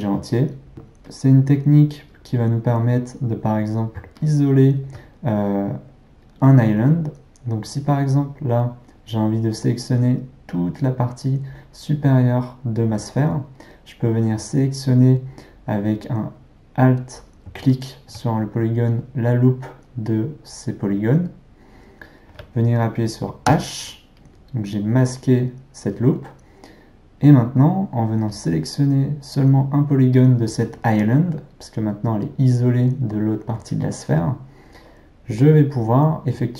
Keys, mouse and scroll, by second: 0.7 click, 23.5 h, 28.4 click.